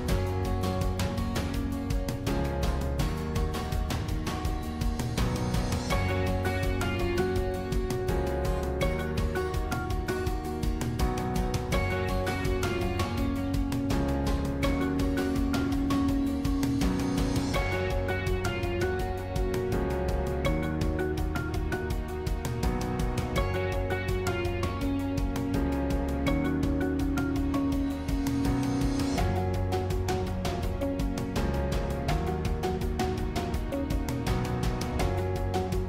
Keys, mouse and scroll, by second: 11.0-14.2 drag, 21.5-23.5 middle drag, 23.5-24.4 scroll up 1, 24.4-24.7 scroll up 1, 24.7 e, 28.3-30.3 middle drag, 30.3 click, 30.7-33.4 middle drag, 33.4 scroll up 1, 33.7 click, 34.0-34.4 scroll down 3, 34.4-35.8 middle drag.